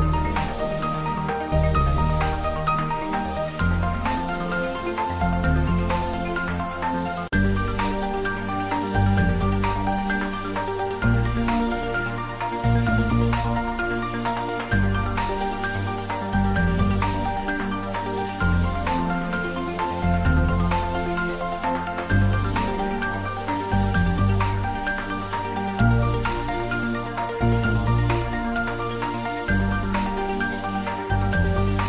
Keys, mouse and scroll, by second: 0.0 click, 0.9 click, 1.6 shift+click, 2.2 typing, 3.4-4.3 typing, 5.8 click, 5.9 Tab, 6.3 ctrl+s, 6.6 Tab, 7.1 shift+middle click, 8.0 ctrl+s, 8.2 ctrl+middle click, 8.9-10.4 shift+middle drag, 10.2-11.1 typing, 12.6 click, 12.8 g, 13.9 click, 14.3 ctrl+s, 14.4 click, 14.9 ctrl+s, 15.0 ctrl+middle click, 16.0 ctrl+middle click, 16.6 ctrl+s, 16.8 ctrl+middle click, 17.2-22.2 shift+middle drag, 22.2 ctrl+s, 23.5-25.6 ctrl+middle drag, 25.6 shift+right click, 26.9 a, 27.9 shift+middle click, 28.5 ctrl+middle click, 29.4 `, 30.3 ctrl+middle click, 30.8 shift+a.